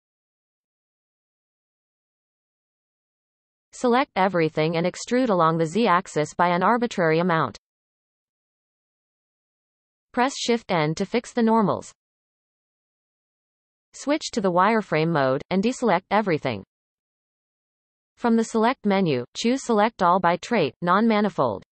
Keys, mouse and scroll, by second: 0.2-1.5 middle drag, 1.5-1.8 scroll down 1, 1.8-3.6 shift+middle drag, 3.6 a, 4.2-7.6 shift+middle drag, 7.6 e, 9.8 a, 11.3 shift+n, 13.3 z, 16.1 alt+a, 18.7-21.7 drag.